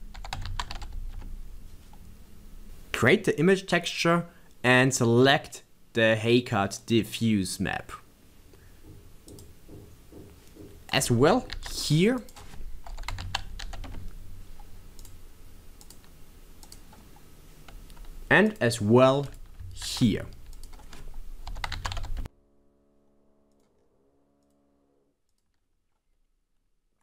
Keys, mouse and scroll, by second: 9.3 click, 24.4 scroll up 1, 24.4 click.